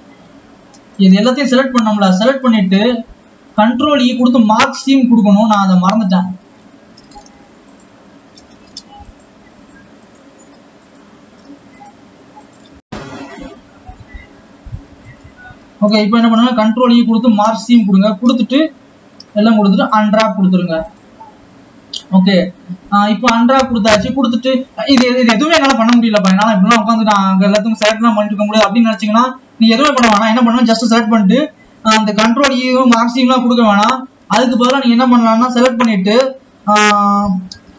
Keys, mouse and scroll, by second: 0.3 Tab, 1.2 alt+shift+click, 2.8 alt+shift+click, 3.7-4.7 drag, 4.7 scroll up 2, 5.7 alt+shift+click, 6.2 alt+shift+click, 6.7-7.4 scroll up 3, 7.4 ctrl+z, 7.9 alt+shift+click, 8.9 ctrl+z, 9.4 alt+shift+click, 11.2 alt+shift+click, 12.0 shift+click, 12.8 scroll down 3, 17.7 ctrl+e, 18.5 a, 21.0 click.